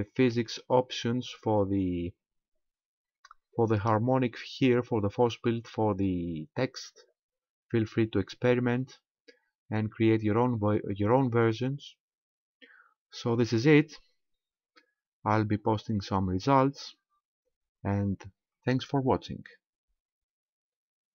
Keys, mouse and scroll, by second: 0.6 right click, 1.5 right click.